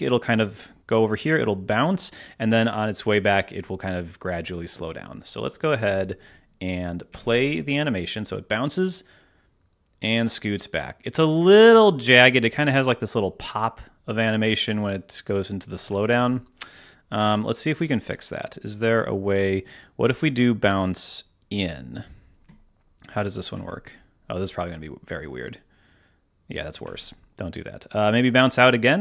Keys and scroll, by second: 7.0 space, 7.8 space, 15.8 space, 16.6 space, 23.5 space, 26.8 space.